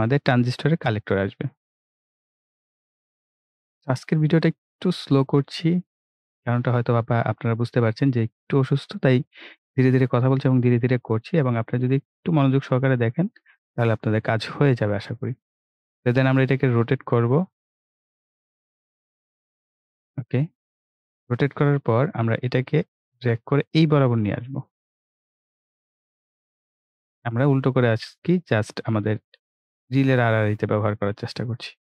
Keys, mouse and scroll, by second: 4.2 scroll down 1, 4.8 right click, 5.5 ctrl+scroll down 1, 7.4 scroll down 1, 7.9-9.4 right drag, 9.4-9.9 ctrl+scroll down 1, 9.9-10.3 ctrl+scroll up 1, 10.8-15.2 drag, 15.2-15.7 ctrl+scroll up 1, 16.9-25.8 drag, 28.2 click.